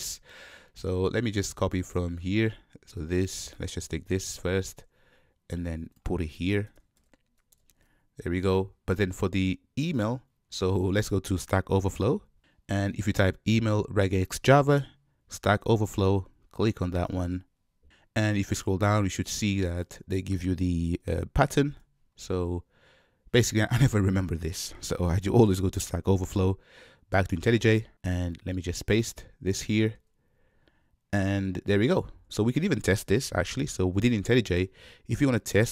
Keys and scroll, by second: 3.8 super+c, 4.4 ctrl+Tab, 7.7 super+v, 29.8 super+v.